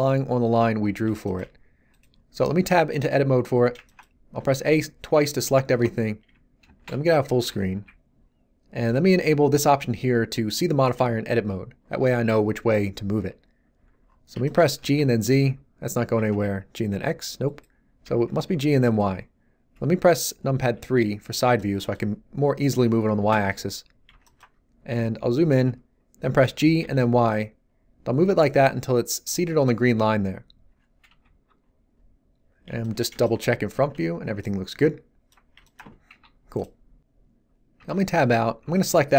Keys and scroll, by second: 2.6 Tab, 4.4 a, 6.6 shift+space, 7.6 n, 14.8 g, 14.9 z, 16.1 g, 16.3 x, 18.0 g, 18.3 y, 20.6 3, 26.4 g, 26.7 y, 31.0 1, 33.9 z, 36.1 1, 37.7 Tab, 38.6 z.